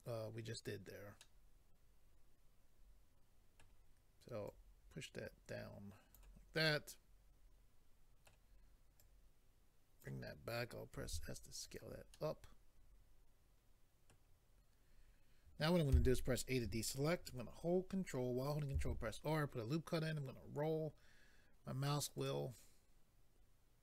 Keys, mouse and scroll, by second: 1.2 middle click, 4.4 click, 6.6 middle click, 9.0 click, 11.0 s, 11.6 click, 12.1 middle click, 15.9 a, 18.8 ctrl+r, 20.1 scroll up 1, 20.8-21.3 scroll up 1, 22.3 click.